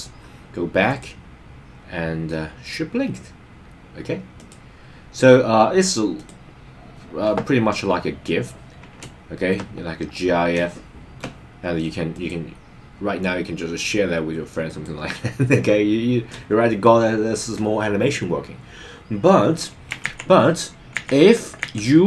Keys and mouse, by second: 0.9 click, 4.3 click, 6.2 click, 9.2 shift+middle click, 10.7 shift+middle click, 12.2 click, 14.7 click, 20.1 super+z, 21.6 super+z.